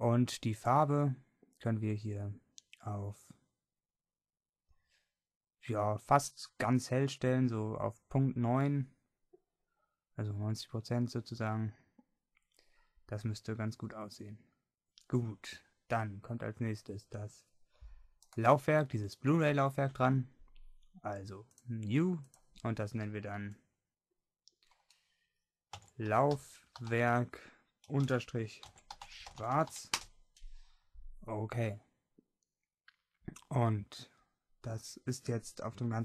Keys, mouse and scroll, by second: 13.4-14.8 middle drag, 15.4-18.4 middle drag, 18.4-21.0 right drag, 21.6-25.7 middle drag.